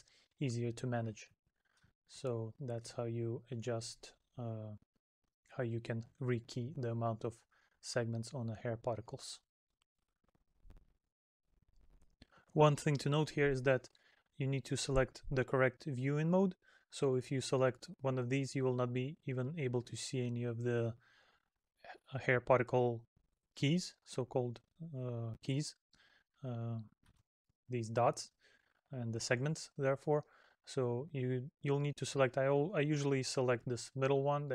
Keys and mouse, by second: 0.8 middle click, 25.9 middle click, 27.5 middle click.